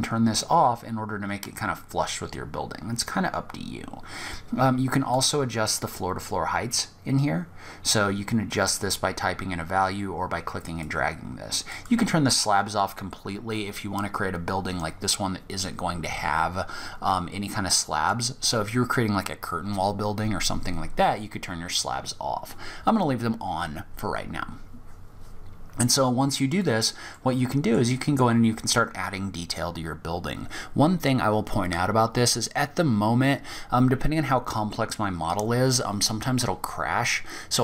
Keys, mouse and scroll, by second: 4.3 click, 10.9 click, 16.1-17.8 scroll up 1, 17.8 scroll down 1, 17.8 scroll down 2, 20.9 click, 25.7 click, 26.3 middle click, 27.2-28.7 scroll up 1, 28.7-29.3 scroll up 1.